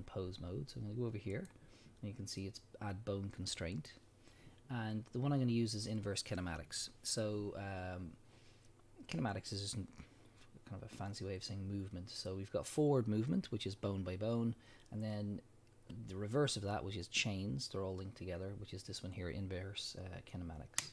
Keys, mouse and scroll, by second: 1.3 click, 3.7-20.9 drag.